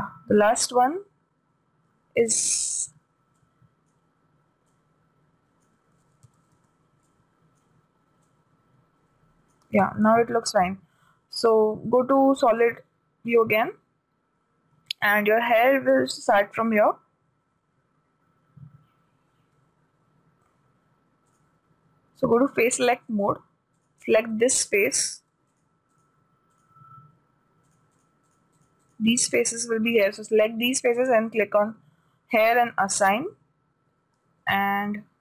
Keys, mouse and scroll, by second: 3.3 b, 5.1-7.0 drag, 6.7 a, 7.0 b, 8.7-10.5 drag, 10.2 a, 13.0-14.6 drag, 21.9 right click, 23.2-24.8 drag, 24.3-31.3 right drag, 31.7-34.9 drag, 33.8 a.